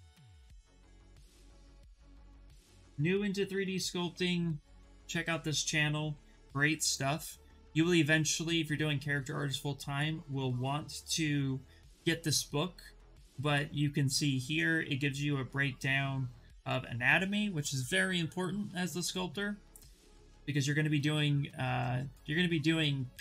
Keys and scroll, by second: 3.2 v.